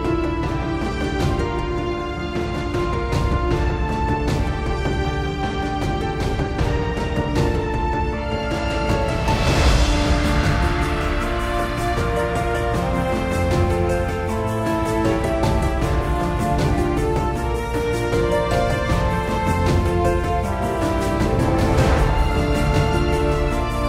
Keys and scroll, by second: 0.0-0.6 typing, 2.8 super+z, 4.0 super+z, 7.7 super+z, 9.0 super+z, 12.9 super+z.